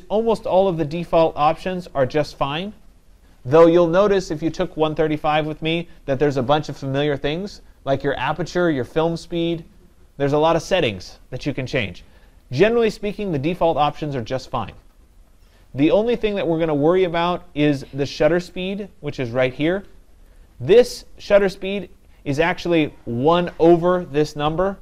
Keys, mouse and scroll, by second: 20.4 click, 21.5 click.